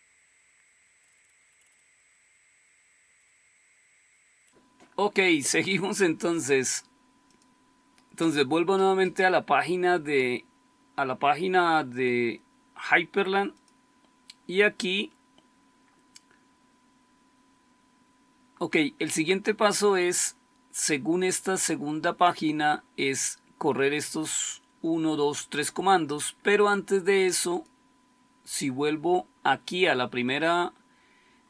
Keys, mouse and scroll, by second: 1.1-4.0 scroll down 1, 4.1 scroll up 1.